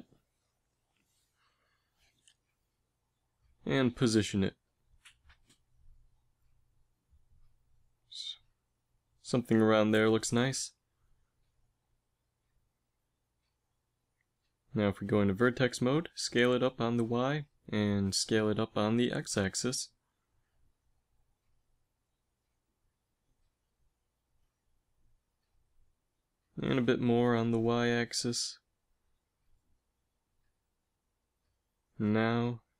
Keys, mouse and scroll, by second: 1.4 s, 3.6 g, 5.2 KP_1, 6.1 Tab, 8.2 g, 11.1 KP_7, 14.1 ctrl+Tab, 15.4 s, 18.4 s, 26.0 s, 32.3 Tab.